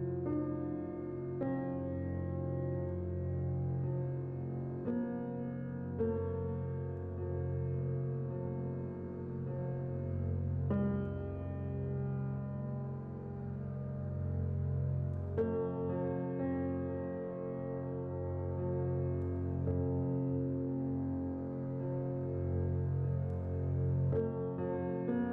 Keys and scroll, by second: 1.5-2.8 typing, 5.3 x, 9.6 a, 21.6 n, 24.8 z.